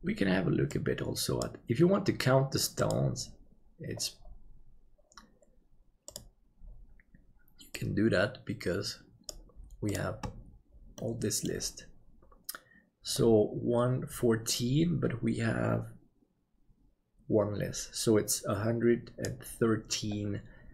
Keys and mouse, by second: 11.0 middle click.